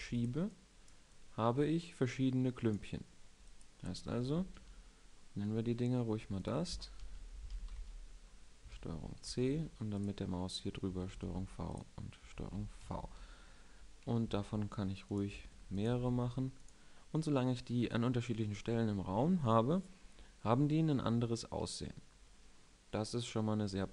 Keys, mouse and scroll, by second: 4.2 n, 6.3-8.8 drag, 8.8 ctrl+c, 9.2 ctrl+c, 11.0 ctrl+v, 12.3 ctrl+v, 12.8 ctrl+v, 14.3 alt+d, 15.3 alt+d, 15.9 alt+d, 22.0 middle click.